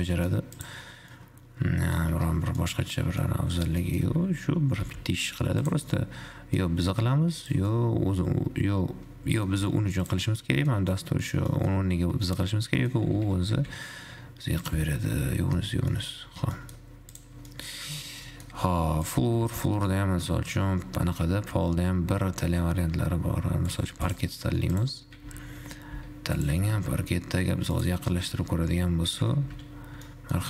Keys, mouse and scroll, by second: 0.9 click, 1.4-2.4 middle drag, 2.4 `, 2.8-3.3 middle drag, 3.3 scroll down 1, 3.4-3.9 middle drag, 3.9 scroll up 1, 4.1 middle click, 4.3 g, 6.3 middle click, 6.8 g, 7.9-9.8 middle drag, 9.8 g, 10.5-13.3 middle drag, 13.3 g, 15.3 middle click, 15.9-16.8 scroll down 5, 16.3 middle click, 16.8 middle click, 17.3 click, 17.8 middle click, 18.0-18.3 scroll down 3, 18.3 scroll up 1, 18.5 shift+middle click, 19.3-22.4 drag, 24.3 click, 25.0 click, 25.3 g, 26.8 g, 28.3 shift+middle drag, 28.5-29.8 scroll up 7, 29.8 shift+z, 30.3 middle click.